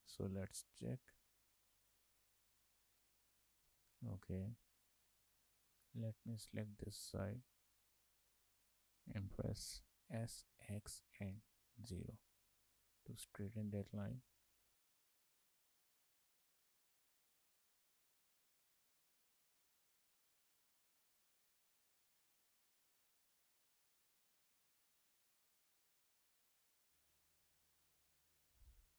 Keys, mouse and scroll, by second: 0.2 shift+middle click, 1.1 click, 1.9 click, 3.7 ctrl+z, 4.4 scroll down 2, 4.6 scroll up 4, 4.7 alt+click, 5.5 scroll down 2, 5.8 shift+middle click, 6.7 scroll down 2, 6.9 shift+middle click, 8.3 click, 10.3 s, 12.8 shift+middle click, 14.4-14.8 scroll up 4, 14.8 middle click, 15.3 alt+click, 15.5 scroll down 1, 15.6 middle click, 16.1 click, 16.3 scroll down 2, 16.4 shift+middle click, 16.6 s, 17.3 shift+middle click, 17.6 scroll up 3, 17.7 shift+middle click, 18.1 alt+click, 18.2 scroll down 3, 18.3 middle click, 18.8 click, 19.2 s, 19.7 shift+middle click, 20.1 scroll up 3, 20.2 shift+middle click, 20.6 alt+click, 20.8 scroll down 1, 20.9 shift+middle click, 21.4 click, 21.5 shift+middle click, 21.7 scroll down 1, 21.9 5, 22.4 scroll down 1, 22.5 shift+middle click, 22.7 click, 22.8 Tab, 23.0-23.6 scroll up 2, 23.6 click, 23.8 click, 24.2 shift+middle click, 26.2 scroll down 2, 26.3 shift+middle click, 27.1 click.